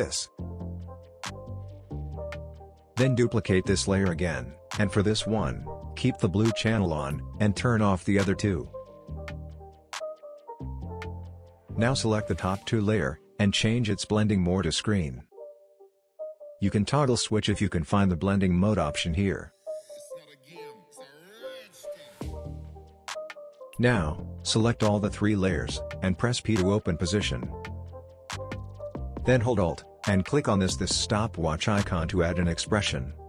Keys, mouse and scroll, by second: 0.5 click, 2.8 ctrl+d, 3.8 ctrl+z, 4.1 ctrl+click, 5.1 ctrl+d, 6.9 click, 11.4 shift+click, 17.3 click, 20.9 F4, 23.1 click, 25.4 p, 27.5 typing, 28.0 click, 29.9 alt+click, 31.0-32.6 typing.